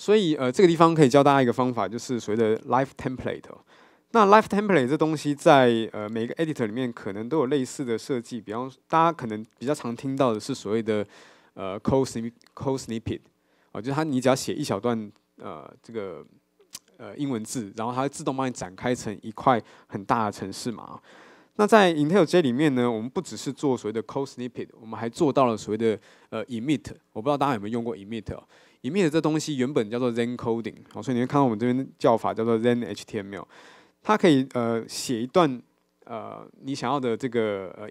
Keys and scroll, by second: 7.1 super+f.